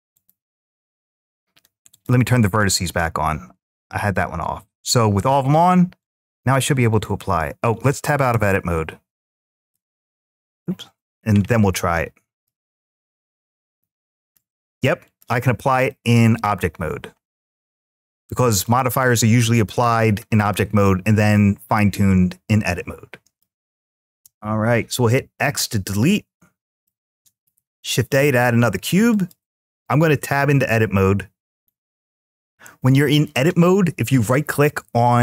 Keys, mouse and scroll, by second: 0.0-1.2 drag, 1.7 click, 4.5-6.4 drag, 6.7 click, 8.1 Tab, 8.1 `, 11.3 `, 14.0-15.0 drag, 15.7-18.4 middle drag, 19.6-20.2 shift+middle drag, 20.6-23.2 middle drag, 24.0 x, 26.6-27.3 middle drag, 27.5 shift+a, 30.2 Tab, 31.3-35.2 right drag.